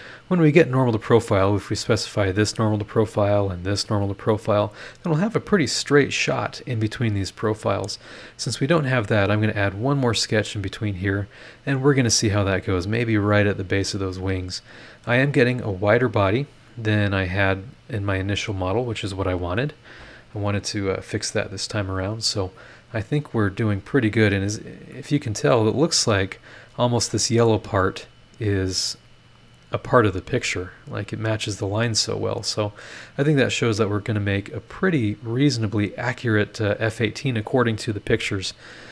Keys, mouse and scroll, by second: 8.6-9.2 scroll down 2, 9.6-10.0 scroll up 2, 22.8 scroll down 2, 23.3 scroll down 2, 23.7-24.1 scroll up 2, 24.9 middle click, 33.3 click, 34.1 scroll up 1, 36.5 scroll up 1, 37.1 scroll down 1.